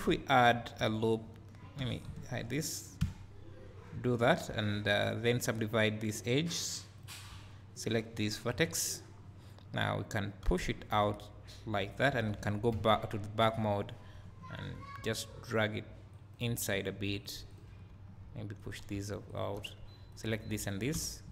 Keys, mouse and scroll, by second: 0.5 click, 1.8 w, 2.2 shift+click, 3.0 f, 4.0 1, 4.5 2, 5.0 click, 7.0 right click, 7.3 1, 7.8 click, 8.5 KP_Decimal, 9.2 scroll up 1, 10.4 g, 11.8 click, 12.7 ctrl+KP_1, 14.2 g, 17.5 click, 18.0 g, 19.0 2, 19.3 click, 20.2 shift+click, 21.0 f.